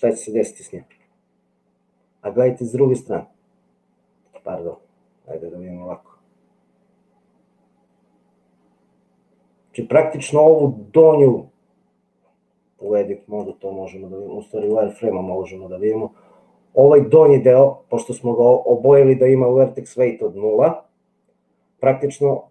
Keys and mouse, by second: 1.0 g, 4.7 middle click, 5.9 g, 12.9 click, 14.7 click.